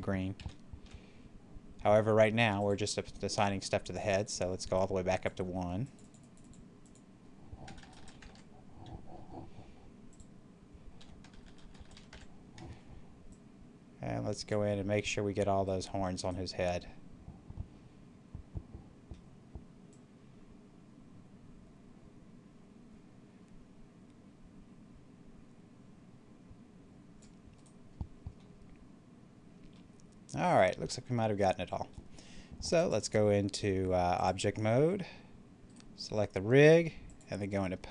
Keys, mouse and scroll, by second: 0.1 click, 0.2 ctrl+z, 2.5 click, 7.6 BackSpace, 8.0 1, 8.2 Return, 10.0 click, 10.9 1, 11.2 BackSpace, 11.8 1, 12.0 Return, 13.2-15.6 drag, 15.6 right click, 16.7-19.8 middle drag, 19.8-27.4 drag, 27.4 right click, 28.3-30.3 middle drag, 30.4 scroll down 1, 31.7 scroll up 1, 32.6 click, 35.5 right click, 36.9 click.